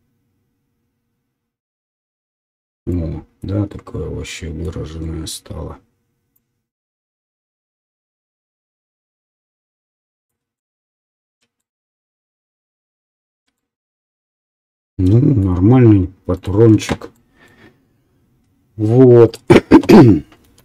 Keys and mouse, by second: 19.3 right click, 19.4-20.6 middle drag, 20.4 KP_1.